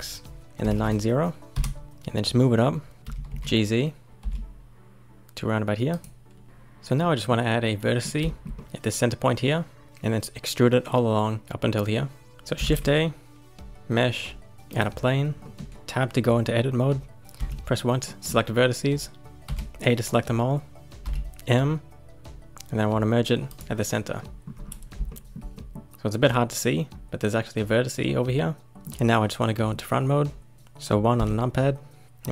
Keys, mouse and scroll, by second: 1.8-3.0 middle drag, 3.1 g, 7.0-9.8 middle drag, 12.6 shift+a, 15.4 middle click, 15.7 Tab, 17.4 1, 18.0-19.4 middle drag, 19.4 a, 21.0 m, 24.2 middle click, 24.5-25.1 scroll up 1, 25.1-28.6 shift+middle drag, 28.7-31.1 middle drag, 31.1 KP_1, 32.0-32.3 scroll up 1.